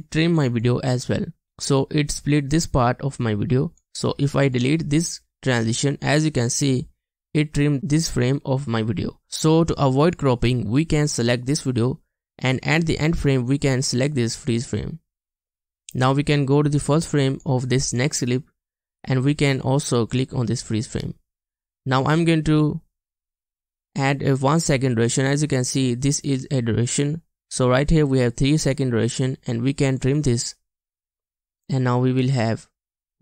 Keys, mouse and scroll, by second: 5.8 BackSpace.